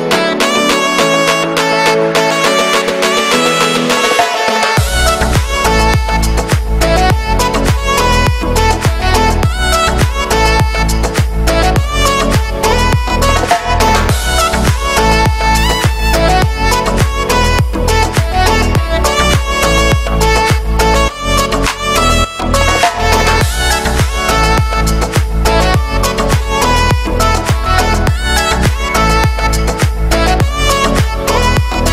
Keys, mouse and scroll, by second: 0.5 shift+middle click, 1.0 shift+right click, 1.4 shift+middle click, 1.7 shift+d, 2.7 KP_7, 3.5-5.1 shift+middle drag, 5.1-7.3 drag, 9.3-12.5 drag, 12.5 e, 13.5 g, 14.5 middle click, 15.0 a, 15.5 shift+n, 17.3 click, 17.5-19.1 shift+middle drag, 19.1-20.1 shift+right drag, 20.1 f, 20.8 right click, 21.1 middle click, 21.3-22.3 typing, 21.6 middle click, 22.6 middle click, 23.0 ctrl+z, 23.2 middle click, 23.4-23.7 scroll up 2, 23.7-24.8 middle drag, 24.8 alt+shift+right click, 25.2 middle click, 25.6 e, 27.0 e, 28.5 f, 29.0 click, 29.1 middle click, 29.6 right click, 30.2 shift+middle click, 30.5 e.